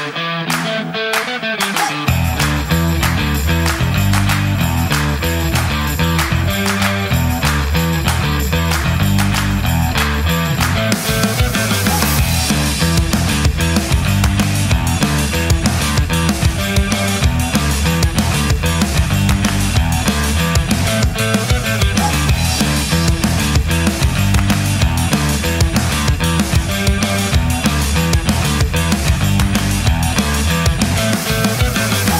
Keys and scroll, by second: 4.0 space, 6.8 space, 17.4-19.3 typing, 19.7 Right, 20.3-21.2 typing.